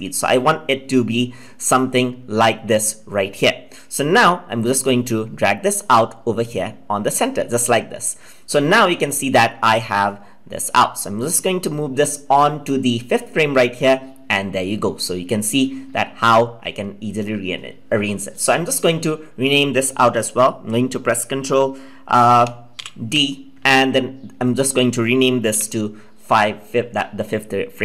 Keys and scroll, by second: 22.7 ctrl+d.